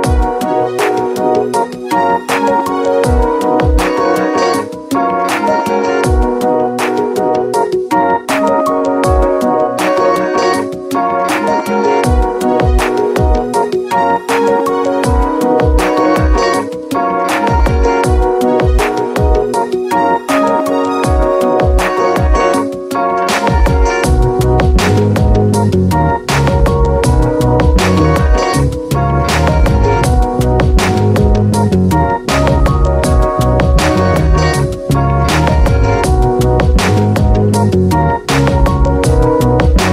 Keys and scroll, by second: 10.0 space, 14.4 ctrl+z, 25.8 space, 27.8 space, 29.9 space, 34.5 ctrl+z, 38.9 space.